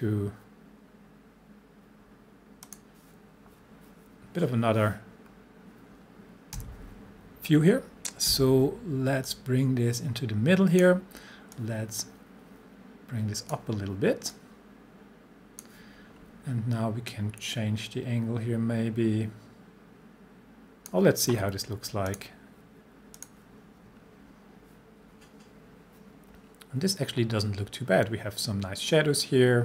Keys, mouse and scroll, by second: 2.6 click, 5.2 scroll down 1, 6.5 c, 8.3 v, 9.3-10.8 drag.